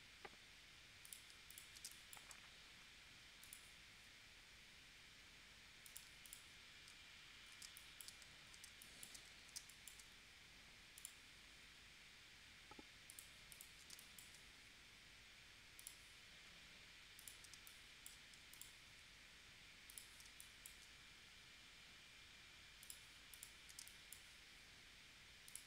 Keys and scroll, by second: 1.9 space, 7.7 space, 8.7 space, 9.7 space, 13.9 space, 17.6 space, 20.3 space, 23.8 space.